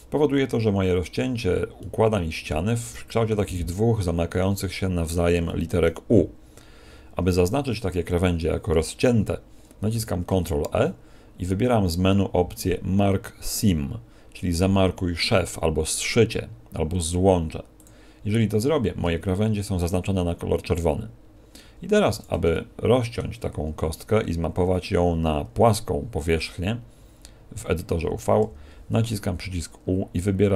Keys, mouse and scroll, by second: 1.6 middle click, 5.4 shift+middle click, 9.8 ctrl+e, 19.0 a, 19.3 scroll up 2, 20.8 scroll up 2, 21.2 scroll down 4, 22.0-22.4 scroll down 2, 22.0 a, 22.4 shift+middle click, 28.4 u.